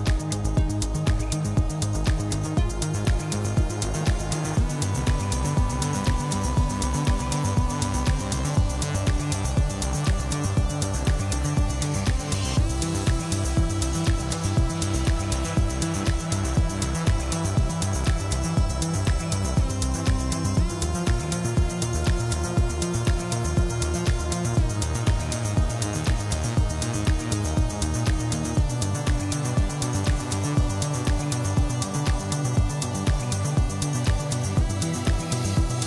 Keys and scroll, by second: 0.9-5.4 typing, 6.6 g, 7.2 s, 8.8 i, 9.0 m, 9.2 o, 9.2 n, 9.4 Return, 11.7 5, 11.8 Return, 12.6 Tab, 14.9 Tab, 15.3 2, 15.7 ctrl+b, 15.7 •, 15.8 0, 15.9 Return, 16.4 3, 17.7 o, 17.8 r, 18.1 Return, 19.0 x, 19.1 ctrl+v, 23.4 2, 23.4 b, 23.9 Return, 26.3-29.5 typing, 32.6 p, 32.9 e, 33.1 o, 33.2 n, 33.3 Return, 35.6 5, 35.6 Return.